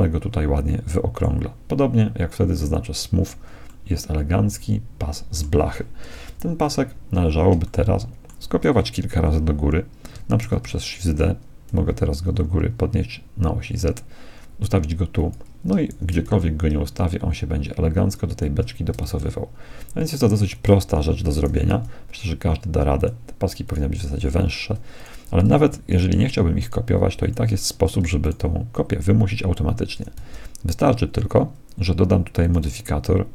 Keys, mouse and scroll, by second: 2.6-4.4 drag, 4.4-5.6 middle drag, 6.4 KP_1, 7.1-7.6 scroll up 1, 7.6-9.4 middle drag, 10.4 shift+d, 16.0 shift+d, 18.8 shift+d, 21.5 s, 23.8-30.0 right drag, 25.7 x, 27.2 x, 30.0 s.